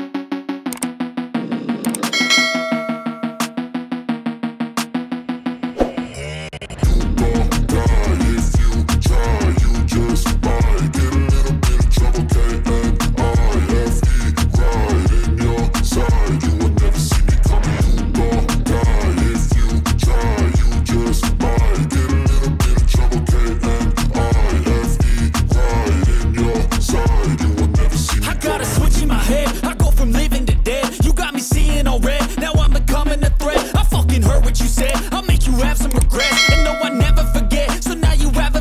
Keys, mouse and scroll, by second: 2.8 ctrl+space, 3.1 click, 4.7 right click, 5.2 scroll up 1, 5.4-8.7 drag, 8.7 ctrl+right click, 9.3 shift+click, 12.5 scroll down 1, 13.7-14.2 scroll up 1, 14.2-17.6 drag, 17.6 ctrl+right click, 18.2 scroll down 1, 18.6-19.8 drag, 20.4 scroll up 1, 20.6-23.1 drag, 23.9-24.3 scroll up 1, 24.5 shift+Page_Up, 25.2 shift+click, 25.7 t, 25.9 scroll down 1, 26.2 click, 28.7 ctrl+right click, 29.1-29.6 scroll up 1, 29.6-31.0 drag, 31.0 scroll down 1, 32.1 click, 33.0-33.9 scroll down 1, 33.9 click, 34.1 scroll up 1, 34.3 click, 35.0 scroll down 1, 35.9 click, 36.2-37.1 scroll down 1, 37.1-38.6 drag.